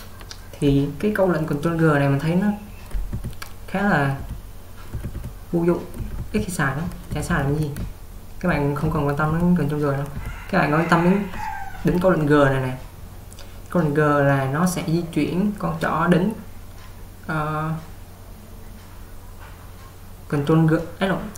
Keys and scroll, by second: 3.3-6.0 typing.